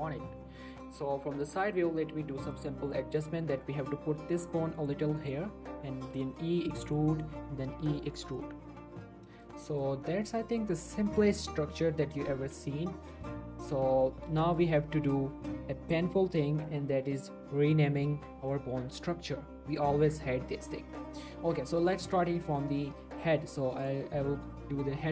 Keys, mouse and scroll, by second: 0.1 shift+middle click, 0.3-0.6 shift+scroll up 1, 1.8-2.2 scroll down 1, 2.2 scroll up 1, 2.5 click, 2.9 g, 4.8 click, 5.4 scroll up 1, 5.7 e, 6.9 click, 7.1 shift+middle click, 7.5 e, 8.4 click, 8.6 scroll down 1, 8.7-9.6 middle click, 9.9 scroll down 1, 10.1 middle click, 10.4 shift+middle click, 12.8-13.2 scroll up 1, 13.3 shift+middle click, 13.9 shift+middle click, 15.1 shift+middle click, 21.9 click.